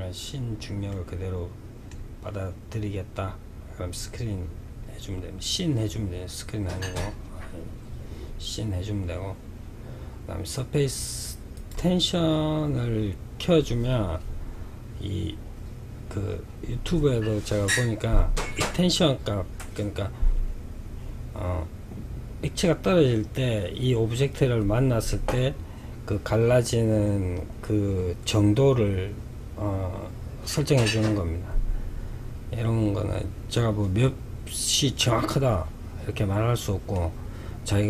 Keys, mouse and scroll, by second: 0.2-3.2 middle drag, 3.9-7.0 scroll down 2, 7.4-8.0 scroll down 1, 10.8 click, 36.2-37.8 middle drag.